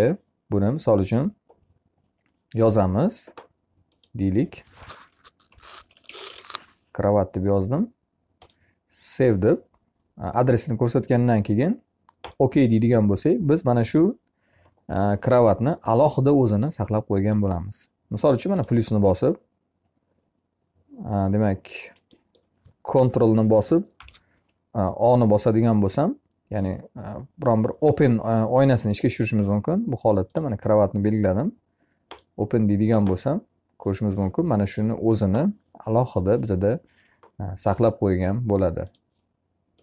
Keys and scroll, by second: 23.4 ctrl+o.